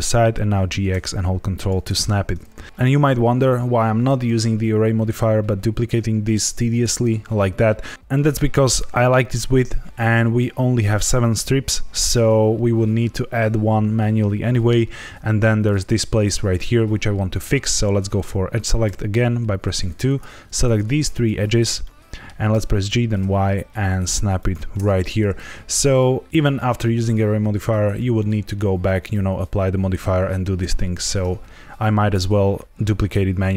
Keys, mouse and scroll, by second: 0.4 g, 0.6 x, 1.5 ctrl+click, 18.8 2, 20.0 click, 20.6 shift+click, 21.1 shift+click, 21.8 middle click, 22.5 g, 22.8 y, 24.3 ctrl+click.